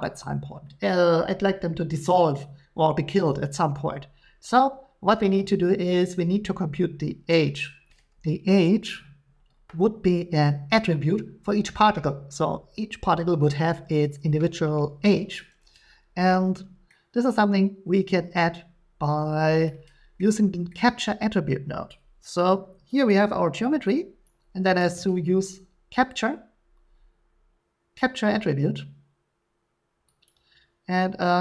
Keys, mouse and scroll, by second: 7.9-11.7 drag, 16.9 middle click, 19.6 click, 20.7 middle click, 22.9 click, 24.2 click, 24.8 a, 30.2 click.